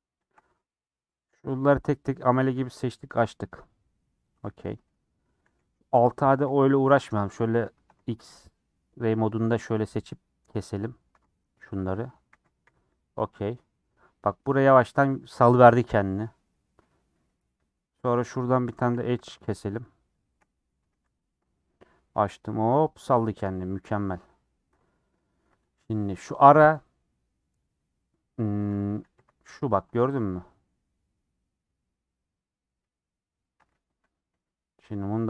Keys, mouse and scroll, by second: 0.3 shift+click, 0.8 middle click, 1.7 scroll down 4, 2.0 middle click, 2.4 a, 3.1 u, 4.4 middle click, 4.7-5.4 scroll up 3, 4.9 middle click, 5.4 middle click, 6.3 KP_1, 7.9 alt+z, 9.0 click, 10.7 middle click, 11.2 alt+z, 12.3 a, 13.1 u, 13.9-18.1 middle drag, 18.1 click, 18.8 2, 18.9 click, 20.1 shift+click, 20.8 a, 21.0 u, 25.7 click, 26.2 3, 26.7 middle click, 27.7 click, 27.8 scroll up 2, 28.4 middle click, 29.1 l, 33.9 a, 34.4 n.